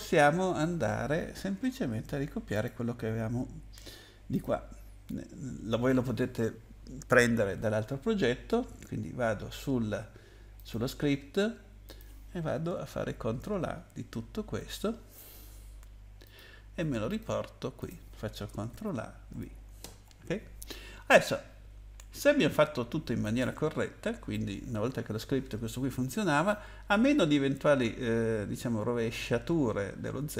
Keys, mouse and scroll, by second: 2.5 click, 4.5 click, 10.6 click, 11.8 click, 13.1 ctrl+a, 16.2 click, 17.1 click, 17.3 click, 17.8 click, 18.7 ctrl+a, 19.4 ctrl+v, 22.5 click.